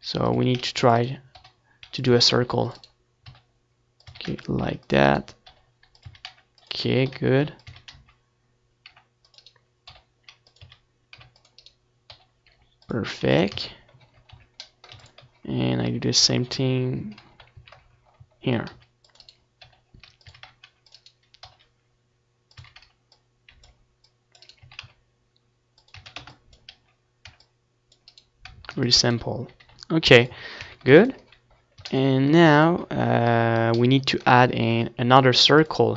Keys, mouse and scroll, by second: 0.3 ctrl+s, 2.3 Tab, 2.8 z, 4.0-6.7 typing, 4.6-7.4 right drag, 5.5-7.9 drag, 6.1-7.4 middle drag, 7.9-9.0 right drag, 8.1-9.8 drag, 8.1 middle click, 8.1 c, 9.9-11.3 right drag, 10.0 s, 11.4 middle click, 11.4 a, 11.6 space, 12.6-13.6 drag, 12.6 c, 14.1-15.4 right drag, 14.1 c, 14.9 g, 15.5 Tab, 15.8 z, 16.2 ctrl+s, 17.2 a, 17.4 middle click, 17.8 ctrl+s, 20.0 KP_1, 20.2 z, 20.6 ctrl+s, 21.5 shift+c, 21.8-24.6 middle drag, 23.0 shift+a, 26.2-27.4 middle drag, 26.9 s, 27.4-31.5 drag, 28.3-31.5 middle drag, 31.6 s, 32.5 s, 33.5 Tab.